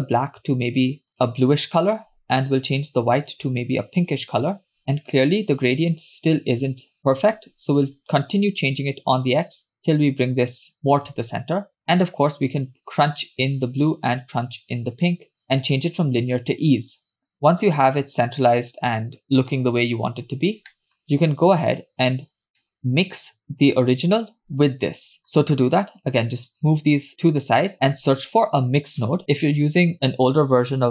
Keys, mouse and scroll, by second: 3.2 click, 4.0 click, 8.0-11.2 shift+drag, 11.9-13.2 drag, 14.5-15.4 drag, 15.6-16.6 drag, 17.3-19.6 shift+drag, 20.2 scroll down 2, 20.7 middle click, 22.1-22.6 scroll down 2, 22.6 middle click, 23.6 click, 24.6 click, 25.1 scroll down 2, 25.2 middle click, 26.5 click, 27.3 click, 27.7 scroll up 2, 28.0 shift+a.